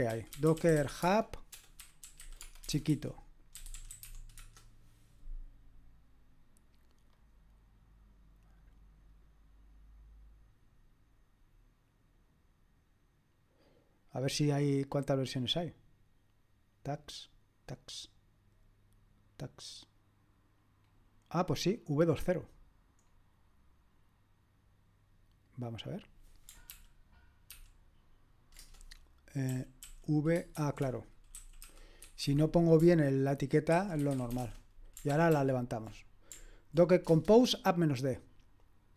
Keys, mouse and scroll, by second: 0.0-4.5 typing, 7.2-15.0 drag, 15.0-17.0 scroll down 1, 17.0-26.7 drag, 26.7 ctrl+p, 27.6 ctrl+p, 28.6 Return, 29.5-32.5 typing, 34.4-35.7 typing.